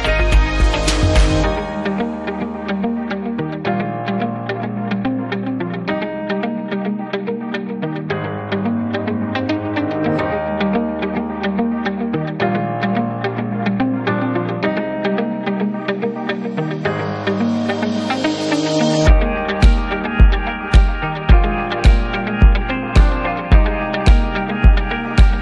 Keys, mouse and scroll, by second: 0.6 click, 1.7 click, 2.8 click, 3.6 click, 10.1 click, 11.4 click, 11.6 click, 12.1-12.9 typing, 13.7 click, 15.2 click, 15.7 click, 16.6 double click, 19.6 click, 20.6 click, 22.5 click, 23.9 click, 25.0 click.